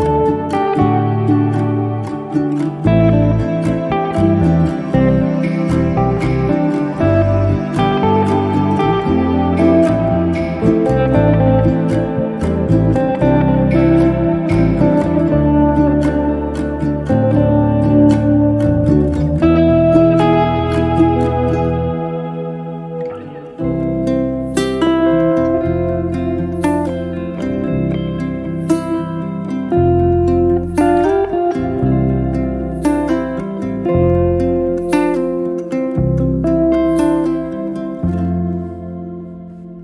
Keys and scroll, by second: 0.6 6, 1.5 Return, 3.9 2, 4.5 Return, 5.8 space, 11.9 KP_Divide, 12.1 4, 12.5 Return, 15.8 0, 16.1 KP_Decimal, 16.3 5, 17.1 Return, 21.7 e, 27.6 p, 28.8 2, 29.2 Return, 30.8 space, 36.9 space, 37.3 b.